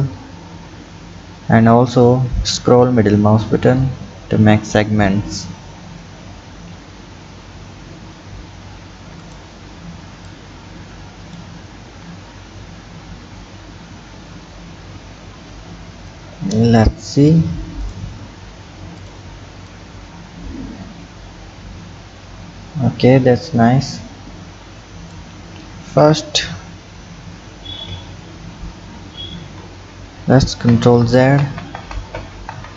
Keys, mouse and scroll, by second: 10.3-11.8 drag, 16.1 click, 17.8 click, 18.4-19.0 scroll down 4, 19.0 click, 19.6 click, 26.0 KP_1, 27.8 ctrl+KP_3, 28.9-29.4 scroll up 2, 29.4 Tab, 30.5 ctrl+z, 31.1 ctrl+z, 31.4 ctrl+z, 31.8 ctrl+z, 32.2 ctrl+z, 32.5 ctrl+z.